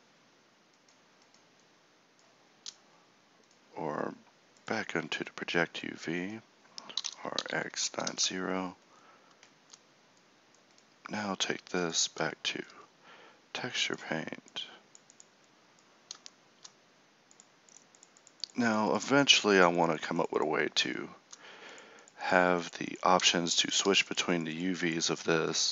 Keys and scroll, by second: 7.0 r.